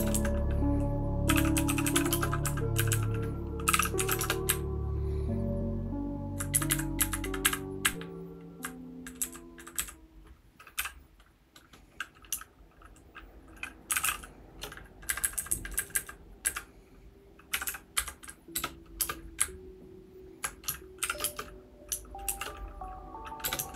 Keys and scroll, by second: 0.0-6.3 typing, 6.5 Up, 6.7 Up, 7.0 Up, 7.4 Up, 7.8-8.6 Up, 9.2 Down, 9.7 Down, 10.8 o, 13.6-16.4 typing, 17.5-19.0 typing, 19.4 Right, 19.8-20.4 Right, 21.0 :, 21.2 space, 22.2 shift+t, 23.4 shift+Tab, 23.4-23.7 typing.